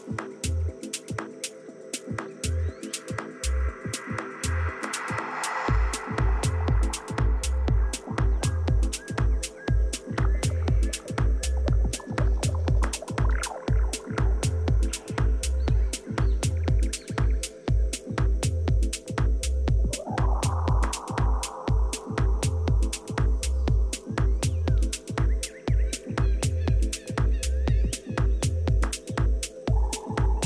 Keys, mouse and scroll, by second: 1.6-2.6 middle drag, 2.6 z, 3.2 z, 5.5-10.9 right drag, 10.1 a, 12.1-14.2 middle drag, 15.8 middle click, 17.3 KP_3, 18.3 z, 20.2 a, 20.5 a, 21.5-23.9 right drag, 24.9 e.